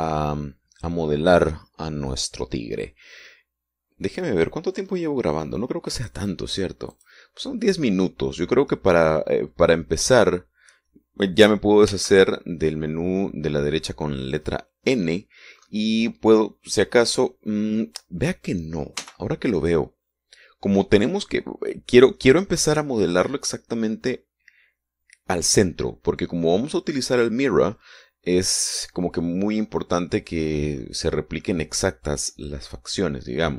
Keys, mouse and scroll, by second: 0.8-5.6 scroll down 2, 7.2 click, 8.1 click, 13.1 n, 16.3-16.6 scroll down 2, 16.8 scroll up 2, 20.2 n.